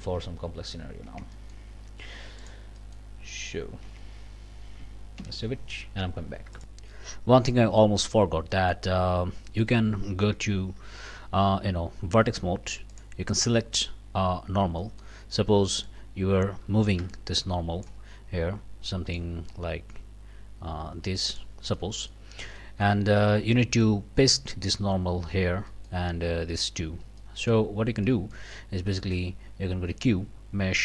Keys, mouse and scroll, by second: 0.0 Up, 0.8 scroll up 1, 1.1 Tab, 1.4 click, 2.4 click, 2.8 click, 3.8 Tab, 4.2 scroll up 1, 5.2 ctrl+s, 6.6 click, 7.6 click, 8.5 click, 9.1 scroll up 2, 9.5 click, 10.8 3, 11.9 1, 12.9 middle click, 13.8 scroll down 1, 14.8 middle click, 15.8-18.0 middle drag, 17.0 n, 19.1-21.6 drag, 21.7 click, 21.9-22.3 scroll up 1, 22.6 shift+click, 23.5 click, 25.7 shift+click, 25.8 shift+middle click, 26.9 scroll down 1, 27.2 shift+middle click, 27.7 shift+scroll up 1, 28.0 shift+click, 28.1 middle click, 28.8-29.3 scroll up 1, 29.9 q.